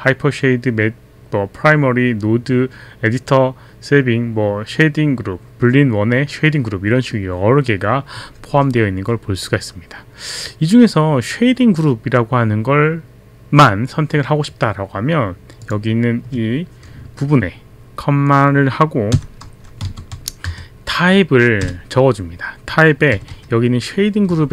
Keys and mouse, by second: 15.6 click, 19.7-21.6 typing.